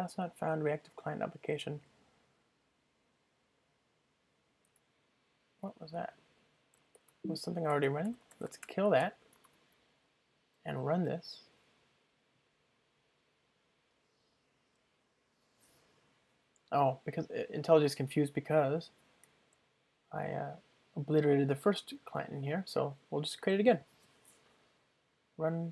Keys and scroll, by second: 10.7 ctrl+r, 25.4 ctrl+shift+r.